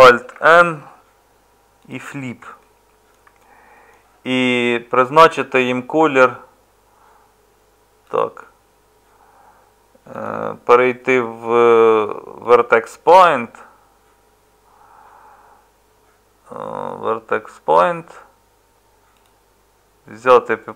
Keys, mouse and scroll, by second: 0.3 alt+n.